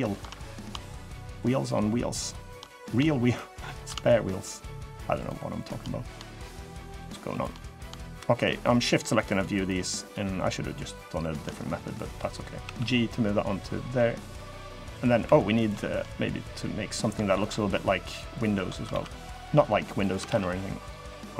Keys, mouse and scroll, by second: 0.0 middle click, 0.6 shift+click, 1.0 shift+click, 1.3 shift+click, 1.9 shift+click, 2.1 shift+click, 2.4 middle click, 3.0 shift+click, 3.4 shift+click, 3.8 shift+middle click, 4.9 shift+click, 5.3 shift+click, 5.6 middle click, 6.2 shift+click, 6.4 shift+click, 7.1 shift+click, 7.3 middle click, 7.7 shift+middle click, 8.1 shift+click, 8.4 shift+click, 8.6 shift+click, 8.8 shift+click, 9.1 shift+click, 9.4 shift+click, 9.8 shift+click, 10.1 shift+click, 10.7 shift+click, 11.0 shift+click, 11.2 scroll down 2, 11.5 middle click, 12.4 g, 14.5 middle click, 15.0 3, 15.3 click, 15.8 middle click, 17.0 shift+click, 17.3 middle click, 18.1 shift+click, 18.6 ctrl+r, 20.0 ctrl+r.